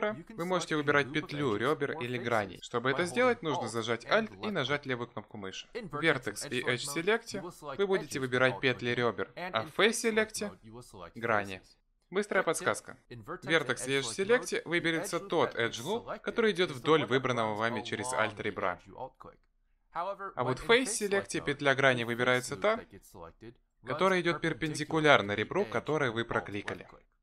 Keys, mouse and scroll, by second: 0.4 click, 0.9 click, 1.4 click, 2.0 click, 4.0 alt+click, 6.2 z, 7.0-7.9 scroll up 6, 7.7 middle click, 9.4 click, 10.0 click, 11.1 alt+click, 12.2 click, 12.8 middle click, 13.9 z, 14.4 middle click, 17.4 click, 19.0 alt+click, 19.6 middle click, 20.2 alt+click, 20.7 middle click, 21.8 click, 22.7 click, 23.7 click, 24.7 alt+click, 25.7 alt+click.